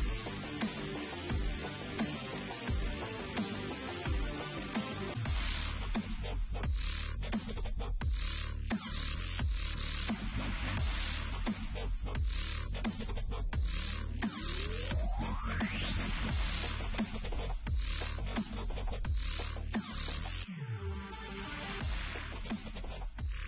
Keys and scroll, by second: 0.9 Return, 2.0 Return, 2.0 Delete, 4.7 Return, 5.2-8.2 typing, 5.3 Return, 9.8 ctrl+t, 13.8 Return, 19.1 typing, 20.8-22.2 typing.